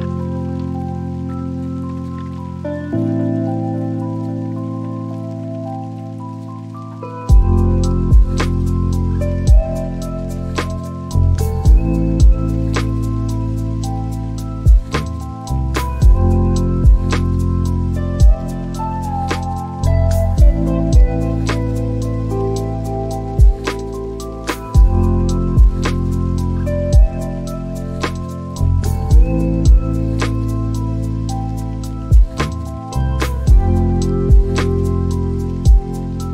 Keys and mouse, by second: 2.6 s, 3.0 x, 3.6 x, 7.1 click, 8.5 click, 9.7 click, 14.6 click, 19.3 Delete, 21.0 click, 21.7 drag, 22.6 shift+a, 27.6 click, 29.5 click, 30.4 shift+d, 32.0 click, 34.7 click, 35.1 click, 35.9 shift+a.